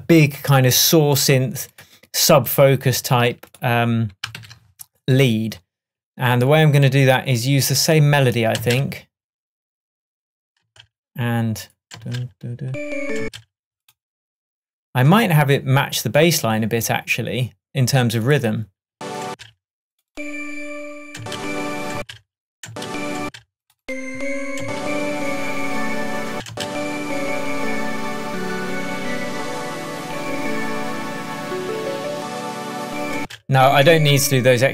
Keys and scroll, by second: 4.4 super+s, 8.6 space, 10.7 space, 12.0 space, 13.3 space, 19.0 space, 21.2 space, 26.4 space, 33.2 space, 34.6 shift+BackSpace.